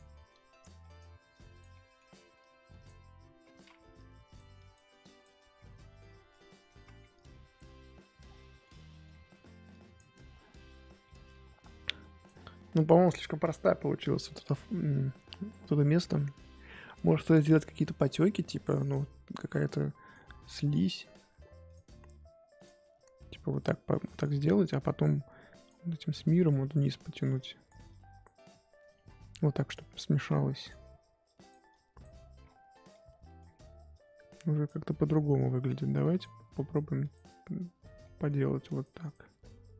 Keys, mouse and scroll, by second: 0.8 middle click, 1.3 click, 1.7 middle click, 2.4-3.5 drag, 3.5 ctrl+z, 3.9-6.0 drag, 6.0 middle click, 6.7 ctrl+z, 7.1-8.2 drag, 8.2 scroll down 2, 8.4 middle click, 9.1-9.7 scroll up 3, 9.7-11.0 drag, 11.0 middle click, 11.3 scroll up 2, 11.6-12.0 scroll down 2, 12.0 click, 12.6 scroll down 2, 12.7 middle click, 13.4-14.2 scroll up 3, 14.2-17.3 middle drag, 17.3 click, 18.1-18.4 scroll up 1, 19.3 click, 20.0-21.7 drag, 22.6-32.4 drag, 32.4 scroll down 1, 32.7 middle click, 33.4-33.9 scroll up 3, 33.9 click, 34.7-35.9 scroll up 2, 36.2-38.0 drag, 38.0 middle click, 38.6-39.7 drag.